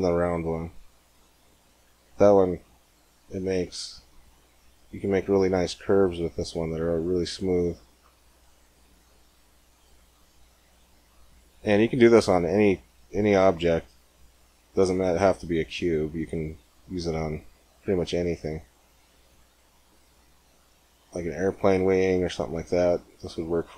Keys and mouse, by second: 14.2-16.2 drag, 16.9 g.